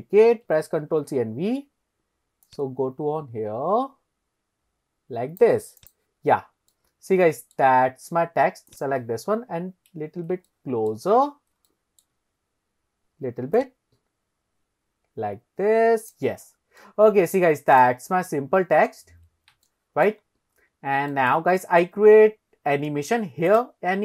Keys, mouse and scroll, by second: 0.9 ctrl+c, 1.1 ctrl+v, 1.6-2.1 scroll up 1, 2.1 scroll up 1, 2.5 click, 5.8 click, 6.3-6.7 scroll up 2, 6.8-7.6 middle drag, 8.7 click, 9.2-9.7 scroll down 2, 9.7-10.4 scroll up 2, 10.5-10.9 shift+drag, 10.5 shift+middle click, 11.7-12.2 shift+middle drag, 12.3 scroll up 1, 13.6 click, 14.0 click, 16.5-16.9 scroll down 2, 16.9-17.4 middle drag, 17.7 click, 18.4-18.7 scroll up 2, 19.7 shift+middle click, 20.1 shift+scroll up 1, 20.3-20.7 scroll down 2, 20.7 scroll up 2, 21.1 shift+middle drag, 23.5 click.